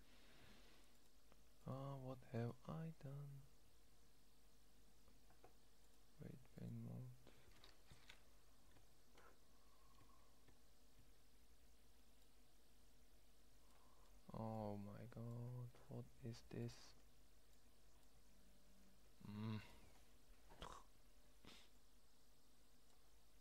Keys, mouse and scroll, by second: 4.6-6.8 middle drag, 7.2-8.4 middle drag, 8.4 `, 9.7 `, 10.2 `, 10.6 `, 11.5 middle click, 12.3 middle click, 19.6 click.